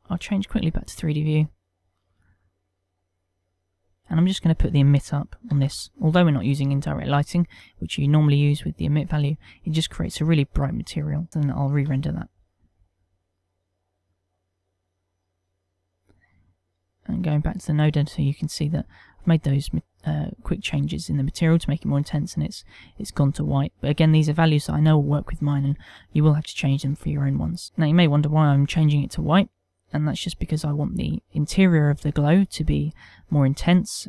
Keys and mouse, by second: 1.2 click, 2.2 click, 6.1 click, 11.3 click, 12.7 F12, 16.9 click.